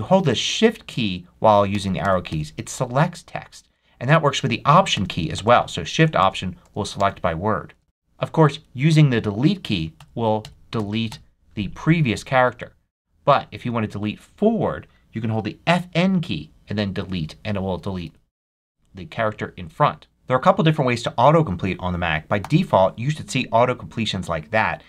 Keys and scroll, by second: 1.6 shift+Right, 4.8 alt+shift+Right, 7.8 Right, 9.9 Delete, 12.3 super+z, 13.5 Right, 16.9 Delete, 22.3 p.